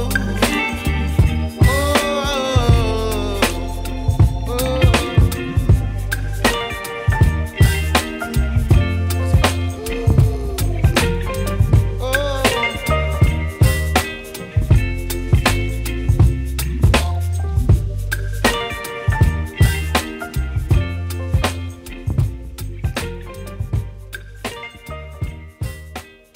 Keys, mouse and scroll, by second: 0.7 ctrl+z, 1.4 ctrl+s, 2.3 click, 5.9 click, 6.7 click, 9.8 click, 12.4 ctrl+s, 14.0 click, 16.2-17.0 scroll up 2, 20.5 click, 24.4 ctrl+s.